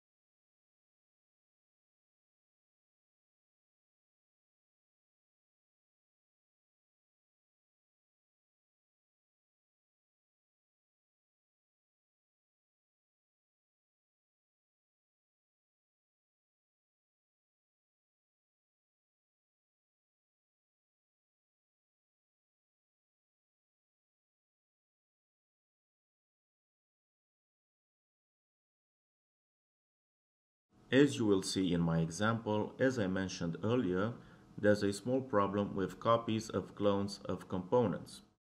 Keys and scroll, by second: 1.1 Delete, 24.4 ctrl+c, 26.0 ctrl+v.